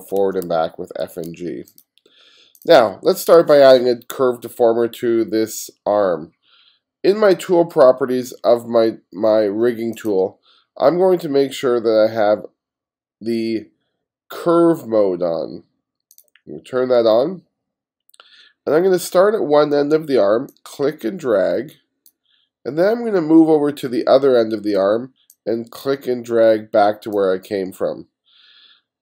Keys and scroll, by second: 0.0-0.5 typing.